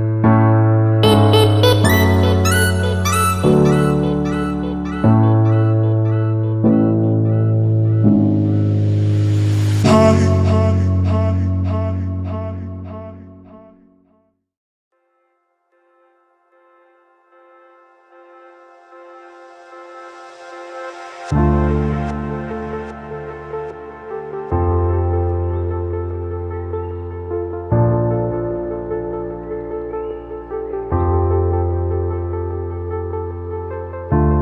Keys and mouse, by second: 7.0-7.8 typing, 7.3 click, 8.7 click, 9.2-9.8 typing, 9.4 click, 12.1 typing, 14.6-15.6 typing, 15.3 click, 16.2-17.0 drag, 17.3-18.8 drag, 19.5-20.8 drag, 24.6-27.0 drag, 29.5 click, 30.1 click, 31.2 click, 33.2 Right.